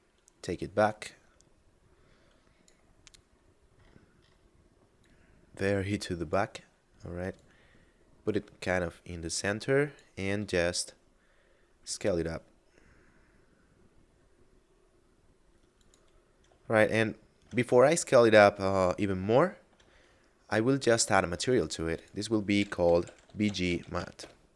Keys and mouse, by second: 0.8 click, 2.8 middle click, 4.8 click, 7.2 click, 10.3 s, 15.7 click, 16.7 shift+middle click, 19.3 shift+middle click, 20.6 middle click, 21.4 click, 22.5 b, 23.5 m, 23.6 a, 23.9 t, 24.1 Return.